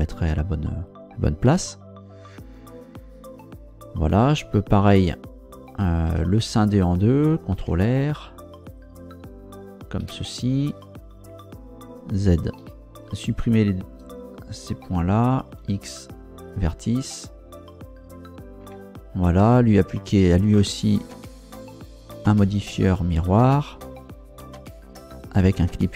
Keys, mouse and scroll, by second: 1.4 KP_0, 2.4 scroll up 1, 6.1 Tab, 7.6 ctrl+r, 8.6 click, 10.0 Escape, 12.6 z, 13.1 right click, 15.5 x, 16.5 click, 18.6 Tab, 21.0 ctrl+Down, 22.1 click, 23.3 click, 25.2 click.